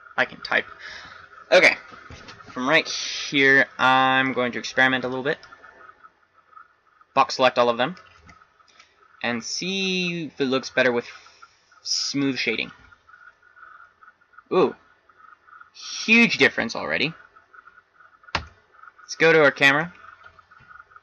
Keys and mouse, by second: 0.0 Return, 5.0 b, 8.2 t, 14.1-15.7 middle drag, 18.3 KP_0, 20.7 shift+z.